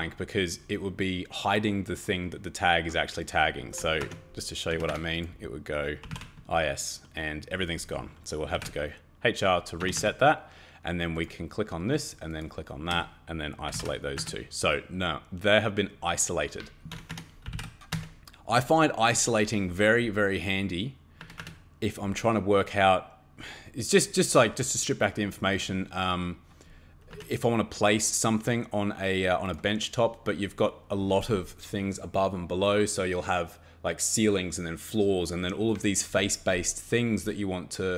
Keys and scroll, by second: 4.0 Escape, 4.7 Escape, 4.9 Escape, 5.8-6.6 typing, 8.2-9.0 typing, 9.8 Escape, 10.0 Escape, 13.5-14.2 typing, 16.9 Escape, 17.1 Escape, 17.2-18.0 typing, 21.2 Escape, 21.4 Escape, 27.1 Escape.